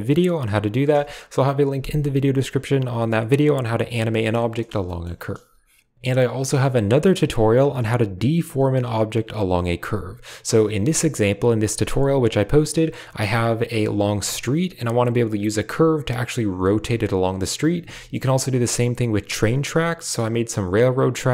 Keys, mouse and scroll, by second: 0.0-1.2 drag, 1.2 space, 1.5 shift+click, 3.6 space, 4.4 shift+middle click, 12.6-17.3 middle drag, 17.3-17.7 scroll up 1, 18.2-20.4 middle drag, 20.4 right click, 20.7 scroll down 2, 20.8 middle click.